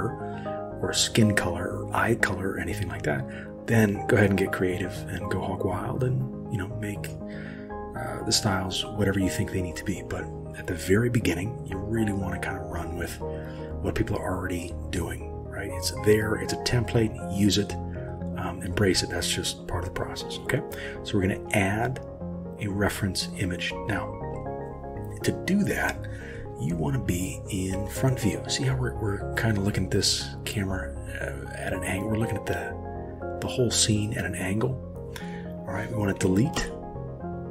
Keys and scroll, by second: 36.6 Delete.